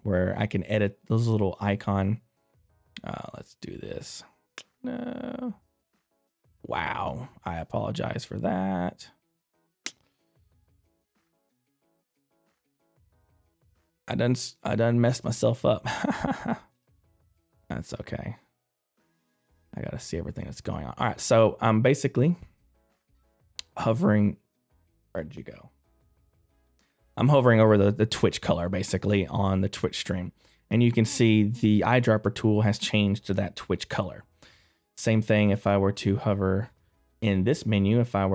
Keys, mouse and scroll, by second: 2.9 click.